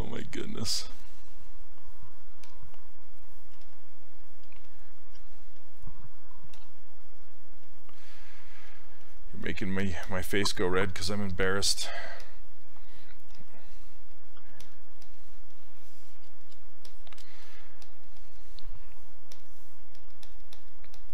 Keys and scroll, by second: 3.6 s, 6.6 2, 13.4 s.